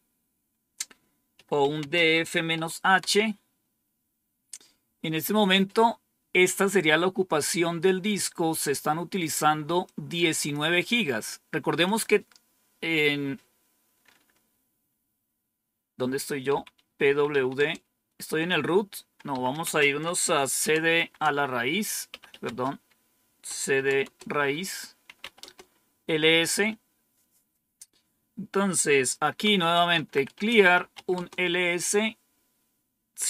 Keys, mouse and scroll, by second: 1.3-2.4 typing, 9.7 click, 11.8 click, 16.4-17.2 typing, 17.5 Return, 19.0-25.1 typing, 29.1-31.3 typing.